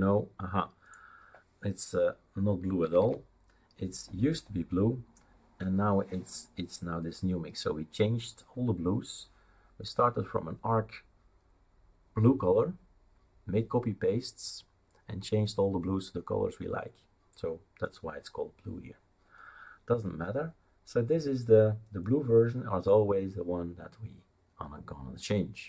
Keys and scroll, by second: 2.8 c, 3.0 c.